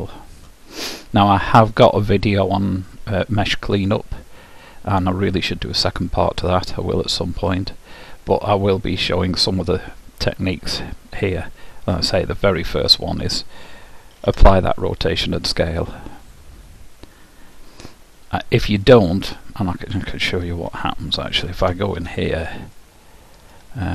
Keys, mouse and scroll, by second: 14.3 ctrl+a, 19.9-21.8 drag, 21.7 Tab, 22.9 middle click.